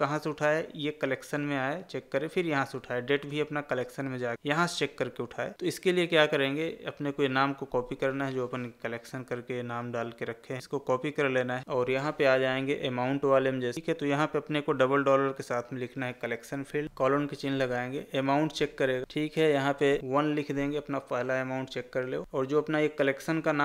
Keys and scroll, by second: 7.0 ctrl+c.